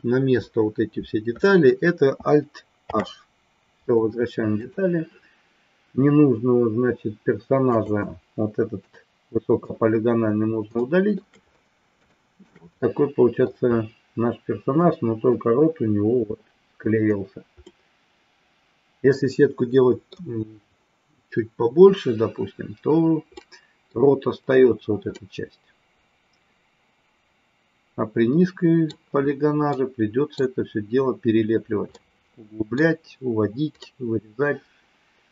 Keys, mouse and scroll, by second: 2.8 alt+h, 4.5 click, 7.7 click, 8.7 Delete, 10.9 shift+middle click, 12.1 shift+middle click, 12.7 middle click, 14.9 middle click, 17.6-20.1 middle drag, 23.3 middle click, 25.2-29.0 middle drag, 29.8 middle click, 32.0 middle click, 33.9-35.3 middle drag.